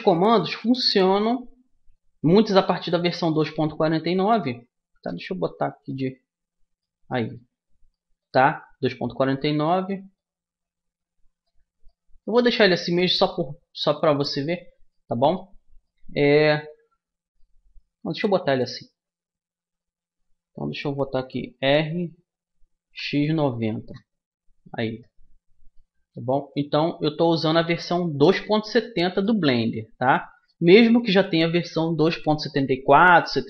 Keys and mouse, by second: 1.7-3.2 drag, 3.2 middle click, 4.0 click, 4.8 middle click, 4.9 KP_1, 5.0 click, 5.9-8.8 middle drag, 8.8-12.7 drag, 13.0 middle click, 16.2-21.5 middle drag, 21.5 r, 24.4-26.4 middle drag, 26.4-28.2 drag, 28.2 middle click, 28.6-31.8 middle drag, 29.4 a, 31.8 right click.